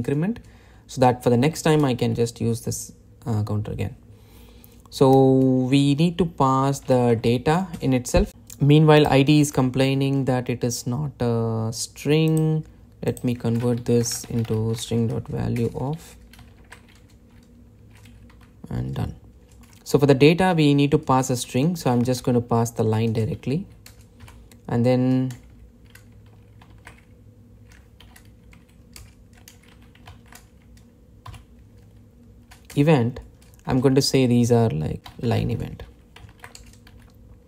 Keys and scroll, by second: 0.5 Return, 16.2 Return, 18.3 Delete, 31.2 Delete, 33.4 Delete, 33.4 Return.